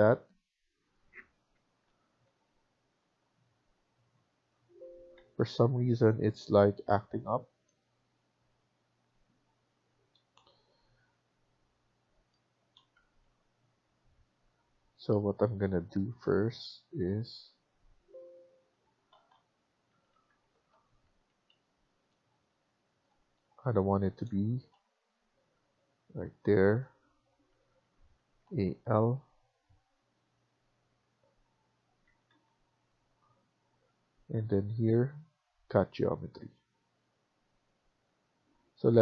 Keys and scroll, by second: 1.6 ctrl+z, 2.1 Escape, 2.4 Escape, 5.1 Escape, 5.3 Escape, 6.1 ctrl+z, 6.5 Escape, 6.7 Escape, 12.8 Escape, 13.1 Escape, 19.1 ctrl+z, 19.7 Escape, 20.1 Escape, 20.4 ctrl+z, 20.9 Escape, 21.1 Escape, 27.4 Escape, 27.7 Escape, 28.9 typing, 31.9 Escape, 32.1 Escape, 38.9 Escape.